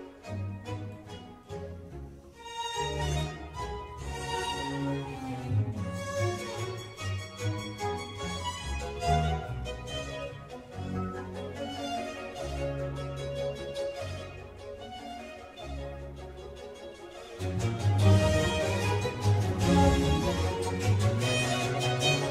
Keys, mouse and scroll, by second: 0.0-3.6 typing, 5.7 Return, 6.7-8.7 typing, 9.5 Tab, 10.2 g, 14.1-17.1 middle drag, 17.8-20.9 middle drag, 22.0-22.3 scroll down 2.